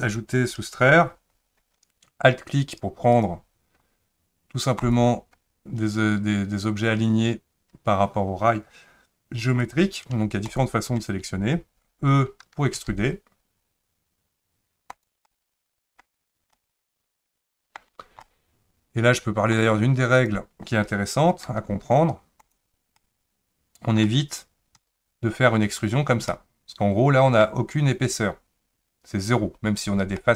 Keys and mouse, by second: 3.2 click, 10.4 ctrl+click, 12.8 e, 15.3 middle click, 16.5-17.8 middle drag, 18.2-19.5 middle drag, 20.2 click, 21.5 e, 23.0 middle click, 24.8 e, 26.3-27.4 middle drag, 30.2 middle click.